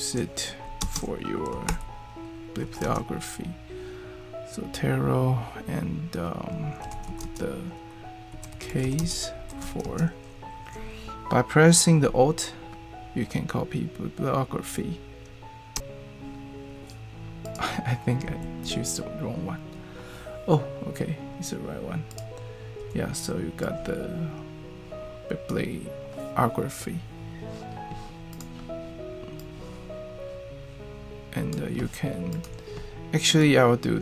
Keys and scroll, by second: 0.8 alt+space, 1.3-2.8 typing, 6.6-10.1 typing, 15.7 alt+Return, 18.4 super+v, 22.8 BackSpace.